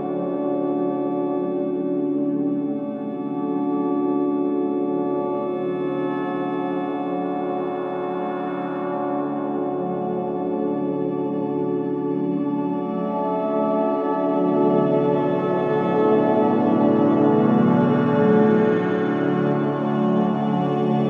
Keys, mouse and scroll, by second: 0.3 scroll up 1, 6.2 scroll up 1, 7.8 scroll down 1, 10.9-11.3 scroll up 1, 13.6 click, 14.5 scroll down 1, 17.6 click, 18.8-20.3 typing, 20.8 Return.